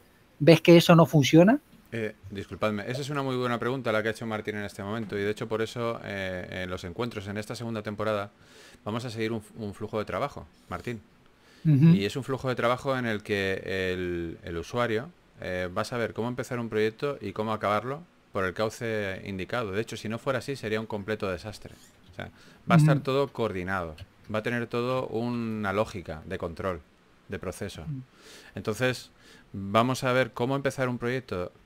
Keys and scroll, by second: 0.0-1.7 typing, 4.3 typing, 6.9 4, 10.4 3, 13.1 3, 15.8 4, 22.1 3, 24.2 shift+s, 26.2-27.2 typing, 29.1-30.5 typing.